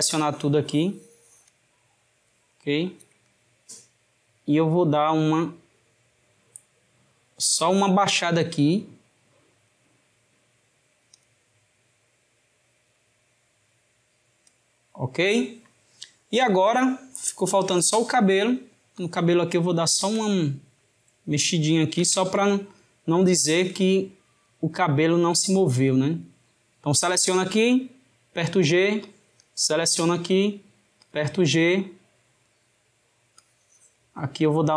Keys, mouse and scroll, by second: 4.4 click, 12.7 click, 17.6-19.2 drag, 19.6-22.1 shift+middle drag, 22.1 Tab, 24.5 click, 25.8 click, 27.5 g, 29.1 click, 33.4 click.